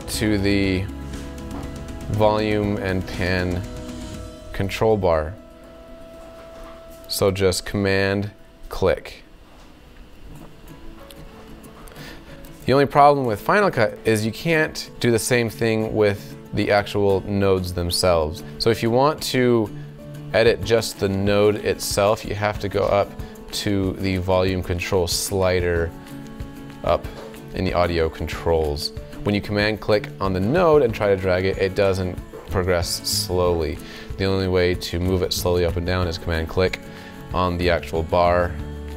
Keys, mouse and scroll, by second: 36.9-38.9 super+drag.